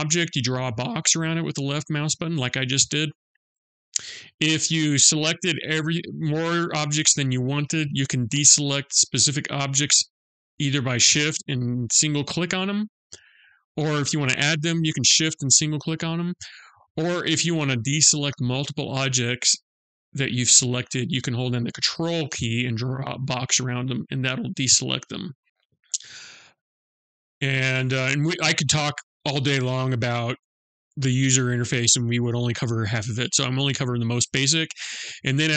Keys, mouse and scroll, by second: 0.3 click, 11.6 shift+click, 15.1 shift+click, 21.5 ctrl+click, 25.7 click.